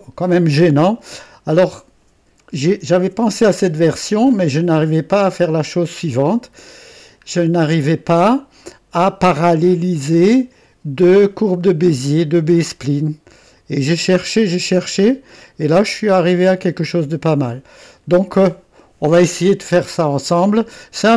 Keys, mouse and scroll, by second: 2.4 right click, 5.3 click, 6.6 right click, 7.2-7.6 scroll down 1, 7.8 right click, 10.1-12.7 drag, 13.5-18.3 drag.